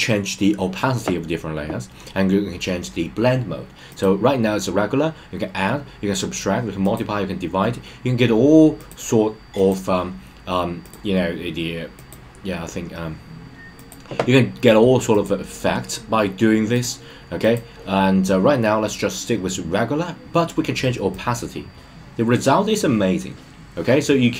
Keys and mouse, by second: 4.0-7.4 drag, 8.7-9.7 drag, 10.9-12.1 drag, 13.8-15.2 drag, 16.8-17.5 drag, 21.2-24.3 drag.